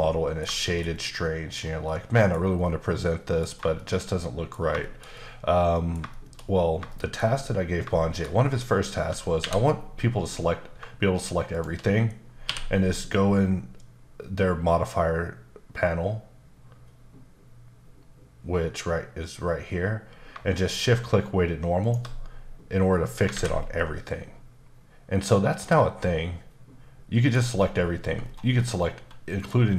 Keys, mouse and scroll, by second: 0.6 shift+middle click, 1.8 middle click, 2.6 middle click, 3.4 scroll down 2, 3.7 shift+middle click, 4.8 shift+middle click, 6.1 shift+middle click, 6.4-6.8 scroll up 2, 6.9 shift+middle click, 7.2-7.8 scroll down 1, 7.9 shift+middle click, 9.4 a, 11.5 shift+click, 12.4 q, 21.8 shift+click, 23.3 alt+a, 23.7 middle click, 26.0 middle click, 28.2-29.4 scroll down 7, 29.4 click.